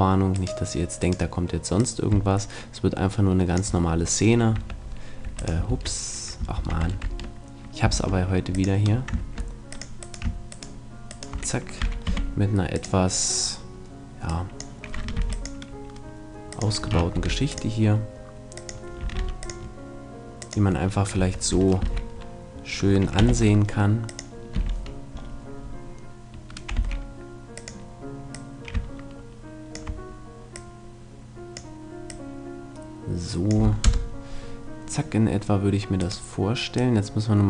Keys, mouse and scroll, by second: 0.4 middle click, 0.4-3.0 right drag, 1.8-3.6 drag, 4.6 Tab, 5.3 Tab, 5.4-7.3 right drag, 6.6 ctrl+Tab, 7.9 ctrl+Tab, 9.2 ctrl+Tab, 10.1-12.4 right drag, 11.8 e, 15.2 ctrl+r, 15.9 click, 16.6-18.4 drag, 17.2 ctrl+r, 18.7-22.1 drag, 19.2 ctrl+r, 21.2 Tab, 21.9 ctrl+2, 23.2 t, 24.1-25.8 drag, 24.6 t, 26.8 s, 27.7-30.1 drag, 30.5-33.9 drag, 33.9 KP_0, 36.1-37.4 right drag, 36.8-37.4 drag.